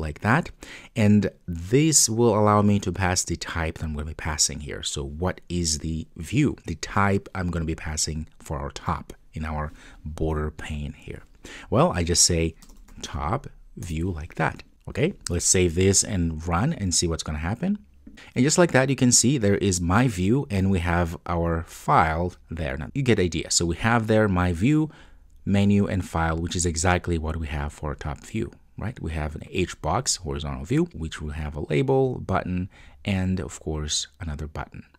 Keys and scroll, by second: 13.9 Return, 15.4 Return, 15.5 super+s, 16.6 super+F2, 17.7 super+F2.